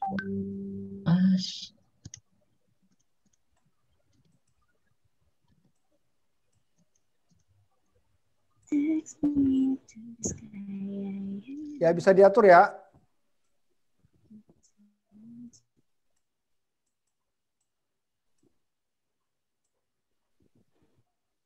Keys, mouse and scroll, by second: 0.7 middle click, 6.1 click, 11.9 click, 13.8 click, 17.1-21.4 click.